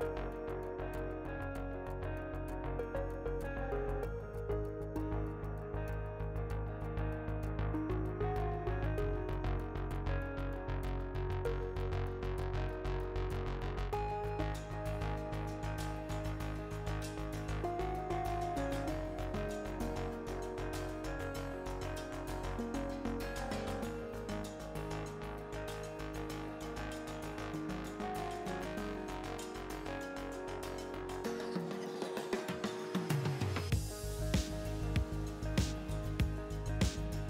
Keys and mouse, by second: 0.9 ctrl+r, 3.5 ctrl+r, 3.8-4.9 drag, 7.3-8.3 super+drag, 7.8 ctrl+super+r, 9.3 ctrl+z, 10.2 ctrl+r, 13.3-15.1 drag, 15.4 click, 15.8 middle click, 17.2 Tab, 18.6 Tab, 22.2 Tab, 22.5 Tab, 24.3 Tab, 25.8 ctrl+r, 28.7 ctrl+r, 31.8 Tab, 33.3 middle click, 34.0 Tab, 34.5-35.8 drag.